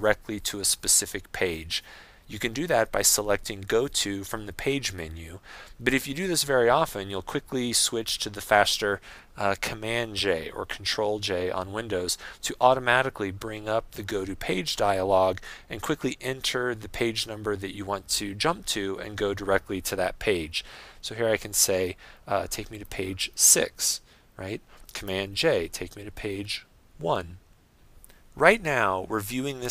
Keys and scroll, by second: 12.1 super+j, 25.3 super+j.